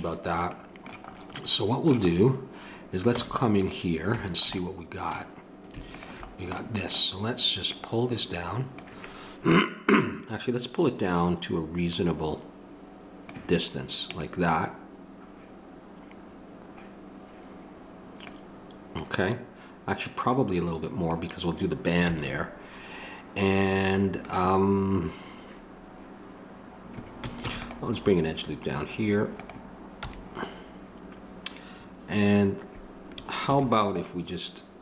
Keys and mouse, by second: 3.2 Tab, 5.9-13.3 drag, 18.3-27.4 drag, 22.1 a, 27.4 ctrl+r, 30.0 a, 33.5 ctrl+r.